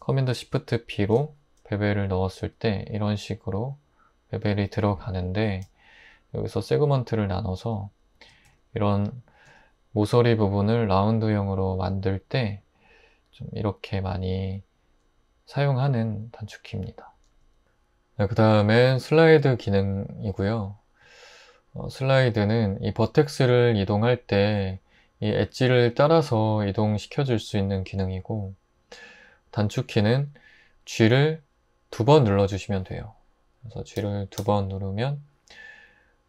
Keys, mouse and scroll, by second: 1.0 shift+super+b, 8.5 Return, 17.4 Tab, 21.0 Tab, 34.0-34.4 typing.